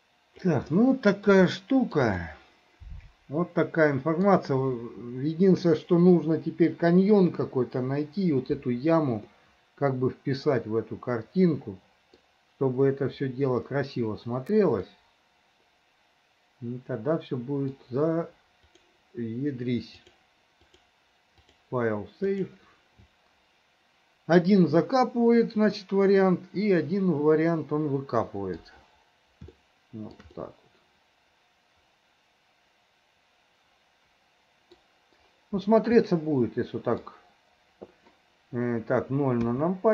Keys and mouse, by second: 0.7 middle click, 1.5 shift+middle click, 2.2-4.3 middle drag, 9.3-12.2 middle drag, 14.9-17.7 middle drag, 18.8 middle click, 20.2-22.7 middle drag, 25.8-28.7 middle drag, 29.6 shift+middle click, 30.6-34.9 middle drag, 36.1 middle click, 39.5 KP_0.